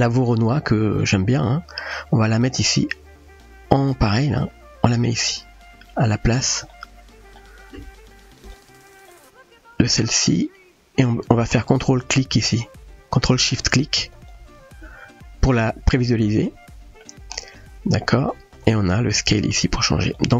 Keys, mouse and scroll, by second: 4.2-5.2 drag, 6.7-7.4 shift+middle drag, 8.1 click, 9.1-10.3 middle drag, 16.3-17.0 middle drag, 18.6-20.2 drag.